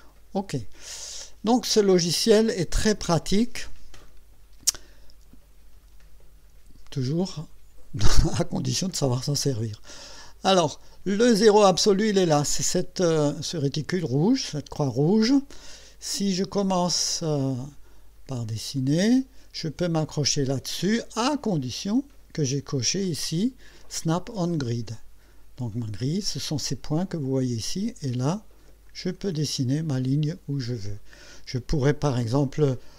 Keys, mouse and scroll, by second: 0.1 click, 10.2 click, 18.8 click, 25.8 click, 28.9 click.